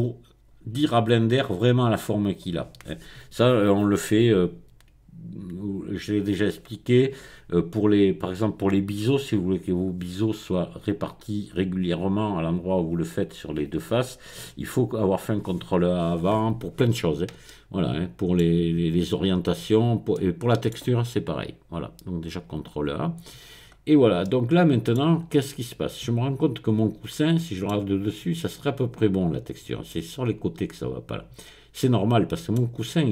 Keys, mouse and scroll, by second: 17.5-21.2 middle drag, 22.2 click, 23.6-24.2 scroll up 1, 24.2 middle click, 25.0-25.4 scroll down 1, 25.4-32.8 middle drag.